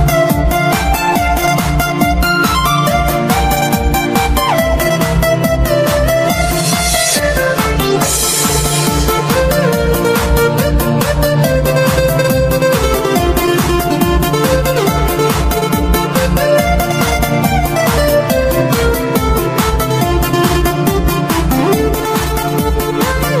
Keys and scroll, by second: 2.1-7.9 typing, 8.6 ctrl+shift+v, 8.8 ctrl+shift+v, 9.1 ctrl+shift+v, 9.3 ctrl+shift+v, 9.6 ctrl+shift+v, 10.3-15.0 typing, 15.5 ctrl+shift+v, 15.8 ctrl+shift+v, 16.0 ctrl+shift+v, 16.3 ctrl+shift+v, 17.0-19.6 typing, 22.2 ctrl+alt+shift+s, 22.6-23.4 typing, 22.7 Delete, 22.8 Delete, 22.9 Delete, 23.0 Delete, 23.1 Delete, 23.1 Delete, 23.2 Delete, 23.3 Delete.